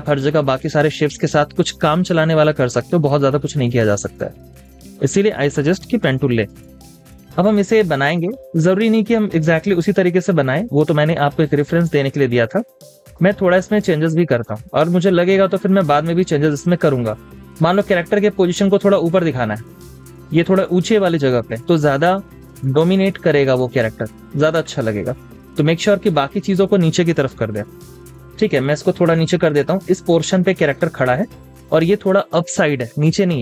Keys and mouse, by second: 0.0 typing, 27.4-28.1 typing, 29.4 typing.